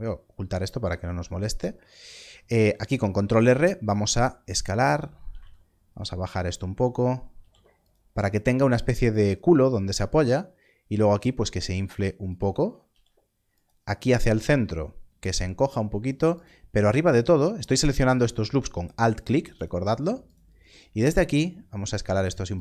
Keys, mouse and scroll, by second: 2.2 scroll up 1, 3.8 s, 4.9 click, 5.3 z, 6.3 click, 7.3 ctrl+r, 9.1 click, 9.8 s, 12.2 s, 12.2 click, 12.8 ctrl+r, 13.5 click, 14.4 s, 15.2 click, 16.3 alt+click, 18.1 alt+click, 18.9 alt+click, 22.5 click.